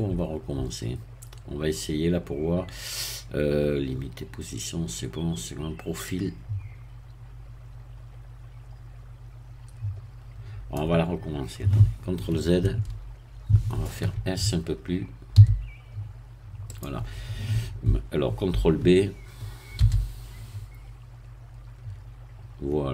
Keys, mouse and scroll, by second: 6.1-10.9 drag, 12.6 ctrl+z, 15.3 s, 16.7-18.5 drag, 19.7 ctrl+b.